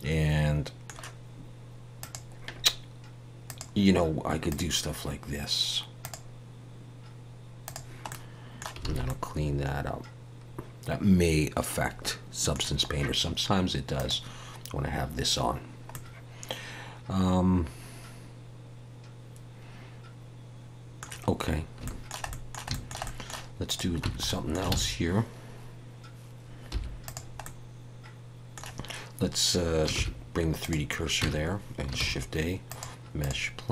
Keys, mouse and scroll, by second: 2.0 click, 8.1 middle click, 8.9 alt+a, 9.0 middle click, 14.0 click, 15.9 middle click, 21.5-21.8 scroll up 2, 21.8 shift+middle click, 22.3 middle click, 22.7 shift+middle click, 23.0 middle click, 23.7 click, 24.0 Tab, 24.3 middle click, 24.7 alt+a, 26.7 3, 27.0 click, 27.4 middle click, 29.9 shift+s, 31.2 Tab, 32.0 shift+a.